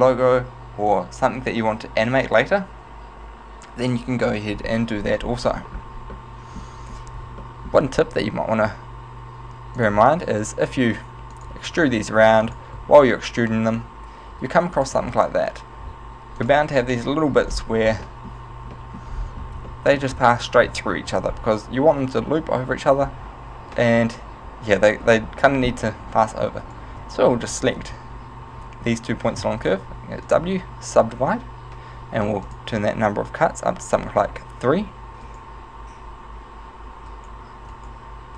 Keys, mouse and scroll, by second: 5.3-6.2 scroll up 2, 6.2 shift+middle click, 6.2 scroll up 5, 7.0-7.5 scroll up 1, 7.5 shift+middle click, 8.3 e, 9.9 click, 10.1 e, 11.5 click, 11.9 e, 12.7 click, 12.9 e, 14.9 click, 15.1 e, 16.6 click, 17.1 middle click, 17.5-18.0 scroll up 4, 18.1 middle click, 18.7-19.8 shift+scroll up 2, 18.9 shift+middle click, 19.8 middle click, 19.8 scroll up 1, 23.7 right click, 26.7 shift+right click, 29.5 w, 32.5 click, 35.3 right click, 37.2 right click, 37.8 right click.